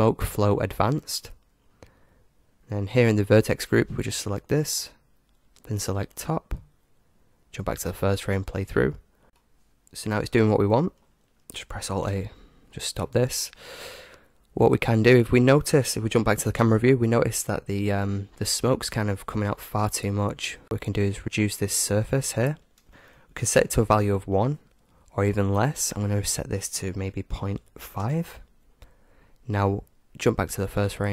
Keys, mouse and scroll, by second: 0.7-3.4 drag, 2.5-3.5 middle drag, 4.1-6.0 drag, 7.4 alt+a, 7.4 click, 8.6-10.5 middle drag, 12.2 alt+a, 14.5-16.5 middle drag, 16.5 KP_0, 17.3-20.6 middle drag, 22.0-23.8 drag, 25.9-27.8 drag, 30.8-31.1 drag.